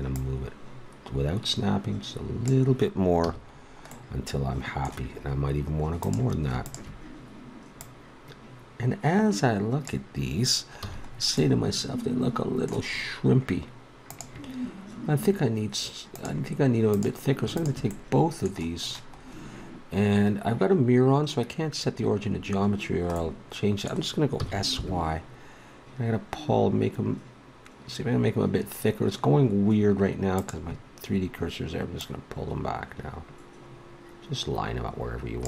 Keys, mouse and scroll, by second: 0.1-2.0 right drag, 3.2 a, 3.5 middle click, 6.0-9.6 drag, 10.8 a, 11.4-14.2 middle drag, 16.9-17.9 drag, 17.9-21.4 middle drag, 22.3-23.2 scroll up 1, 23.7 middle click, 24.4 s, 31.9-33.7 drag.